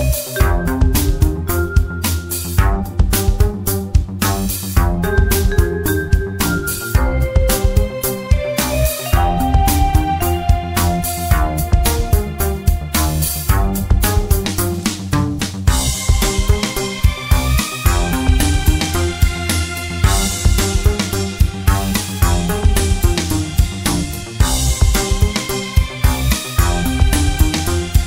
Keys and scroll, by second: 23.8-25.6 typing.